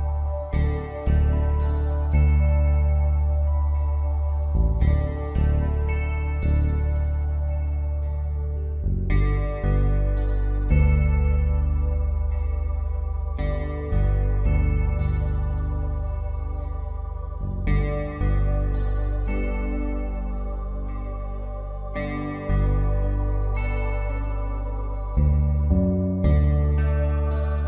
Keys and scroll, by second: 4.3 space, 9.1 shift+F5, 9.4 shift+F6, 11.3-11.7 typing, 11.9 Return, 13.0 ctrl+shift+i, 13.5 Delete, 14.2 ctrl+z, 16.9 alt+Delete, 17.8 ctrl+d, 19.0 ctrl+alt+z, 20.1 □, 21.3 □, 22.1 space, 25.5 space, 27.4 space.